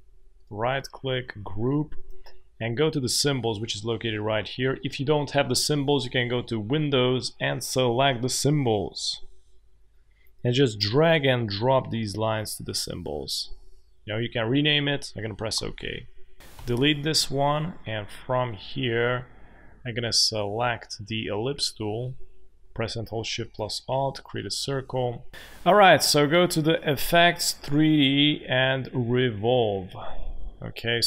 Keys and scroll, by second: 15.5 Return, 16.5 Delete, 24.8 v.